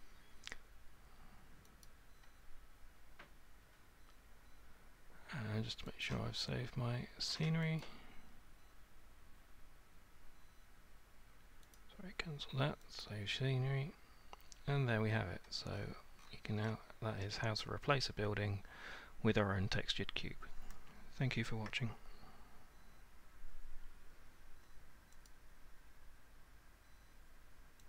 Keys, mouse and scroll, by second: 1.9 click, 5.2 click, 6.1 click, 7.8 click, 11.8 click, 13.0 click, 15.7-16.3 scroll, 16.7 middle click, 16.9-17.9 scroll, 21.8-22.2 scroll, 25.3 click.